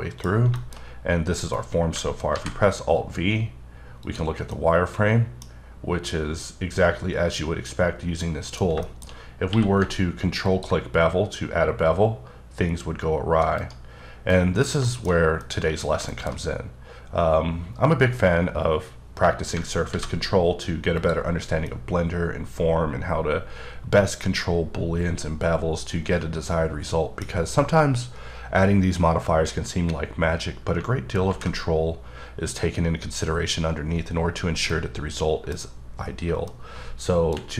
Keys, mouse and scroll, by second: 0.5 shift+middle click, 0.7-1.2 shift+scroll up 3, 1.3-1.7 scroll down 2, 2.3 alt+v, 4.0 click, 4.5 middle click, 5.5-7.0 scroll up 2, 7.0-7.7 scroll up 1, 7.9 scroll up 1, 8.2 middle click, 8.8 shift+scroll down 1, 9.1-9.5 scroll up 2, 9.5 q, 10.4 click, 14.0 scroll down 3, 14.3 middle click, 15.1 scroll down 1, 15.4 middle click, 15.8 scroll down 1, 16.1 middle click, 18.3-19.5 scroll up 1, 19.9 alt+v, 20.9 click, 21.6 middle click, 30.8 alt+Num_Lock, 30.8 alt+middle click, 31.2 alt+v, 34.7 middle click, 36.5 shift+middle click.